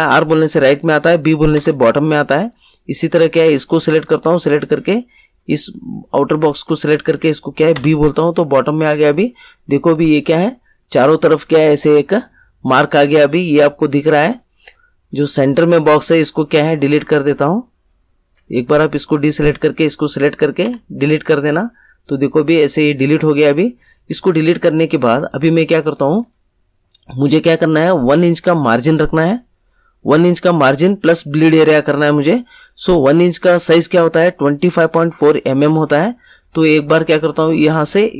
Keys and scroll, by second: 1.5 b, 7.7 b, 20.6 Delete.